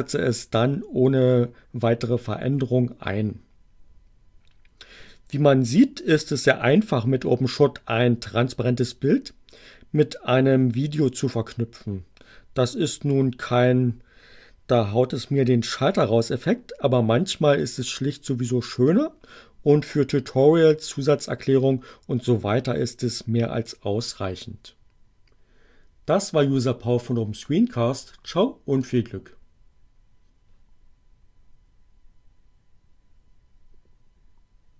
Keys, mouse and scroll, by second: 28.7 click.